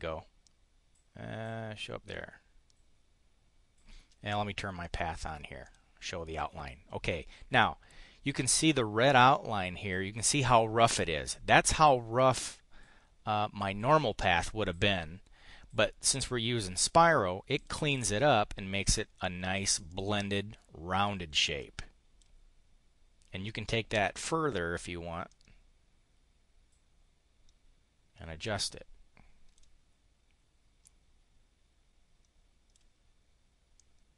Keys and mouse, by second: 4.8 click, 5.7 click, 17.6 click, 17.8 click, 19.2 click, 19.9 click, 21.6 click, 23.5 click, 25.3-29.7 drag, 30.8-32.9 drag, 33.7-34.1 drag.